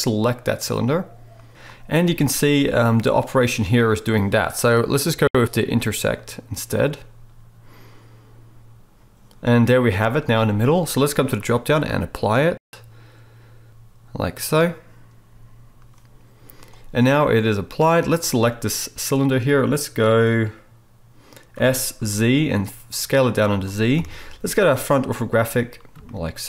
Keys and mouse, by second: 2.0 z, 11.5-18.1 drag, 18.1-26.4 middle drag, 21.5 s, 23.9 KP_1.